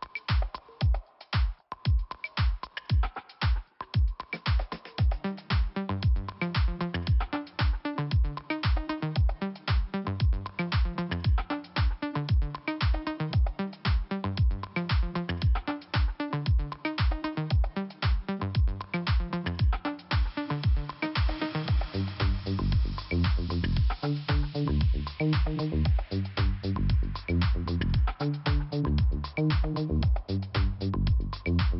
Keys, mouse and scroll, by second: 0.9 middle click, 3.0 middle click, 4.0 click, 7.8 click, 9.7 click, 10.7 click, 13.6 click, 14.8 click, 16.0 click, 16.7 click, 19.4 click, 22.7 click, 22.8 click, 23.5 click, 24.4 click, 24.5 click, 24.8 click, 25.6 click, 25.7 click, 26.3 click, 29.0 click, 31.1 scroll down 1.